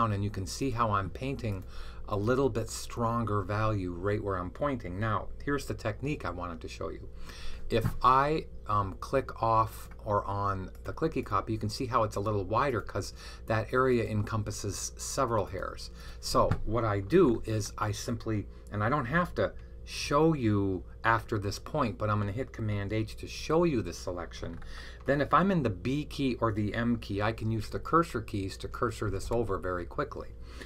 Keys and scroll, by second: 23.2 super+h, 27.4 Left, 27.9-29.3 typing.